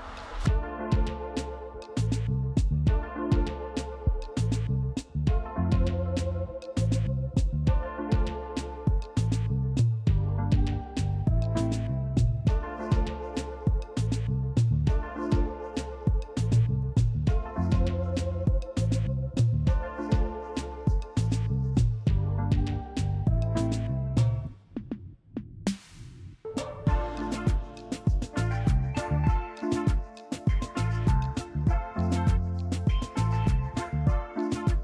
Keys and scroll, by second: 3.1 a, 6.0 f, 6.5 s, 9.6 f, 15.8 6, 18.3 f, 20.8 f, 30.1 i.